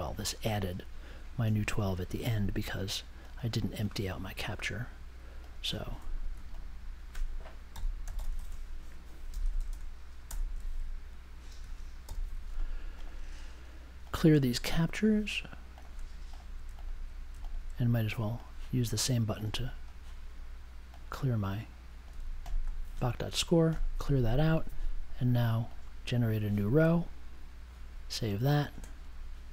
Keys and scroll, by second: 7.4-10.3 typing, 12.0 super+j.